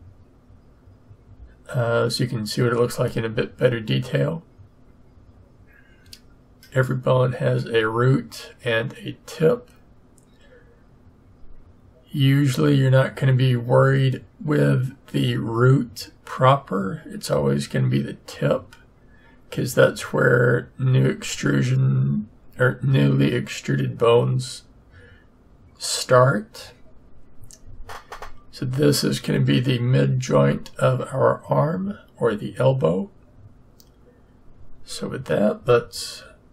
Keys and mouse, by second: 2.9-34.5 drag, 34.5 middle click, 34.8 middle click.